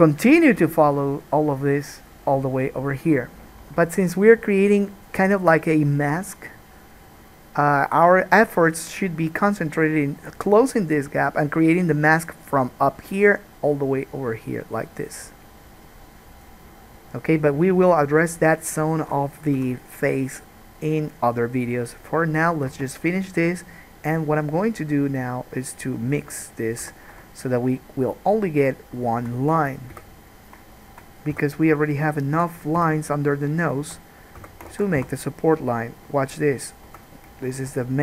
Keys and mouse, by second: 19.8 n, 22.9 Tab, 25.9 click, 27.0 3, 27.1 click, 28.2 shift+click, 28.7 shift+click, 29.2 shift+click, 30.2 f, 30.2 right click, 30.6-34.1 shift+drag, 31.6 f, 33.0 f, 34.6 f, 35.0 alt+a, 35.2 1, 37.1 2.